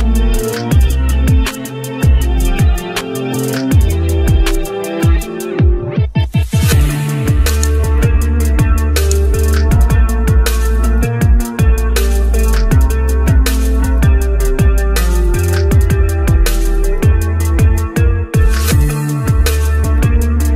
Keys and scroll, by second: 17.0 ctrl+u, 17.2 ctrl+i.